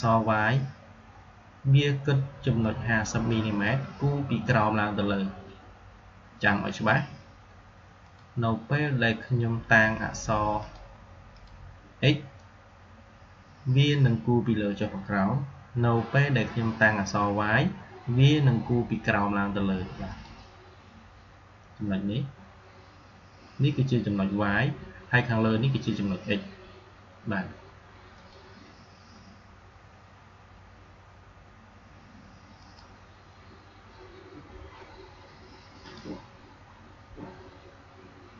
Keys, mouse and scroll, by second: 2.5-5.4 drag, 7.9 click, 10.5 click, 19.9 click, 28.0 click, 32.5 click, 35.7 click, 38.2 click.